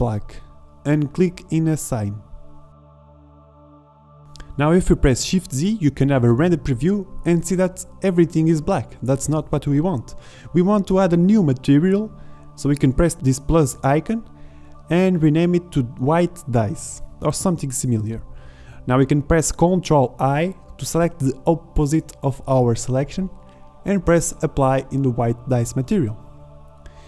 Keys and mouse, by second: 9.0 shift+z, 10.9 shift+z, 11.8-19.9 drag, 21.0 ctrl+i, 22.9-24.3 drag, 24.3 shift+z.